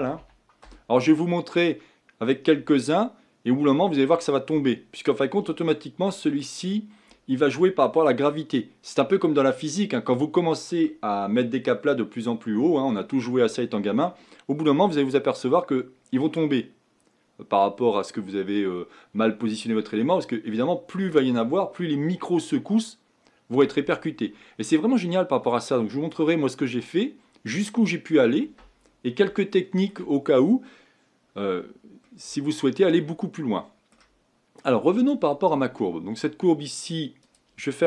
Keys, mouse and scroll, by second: 24.8-26.2 middle drag, 26.2-26.7 scroll up 1, 26.7-27.6 scroll up 3, 27.6-29.4 scroll down 2, 29.4-35.0 shift+middle drag, 35.0-37.8 drag.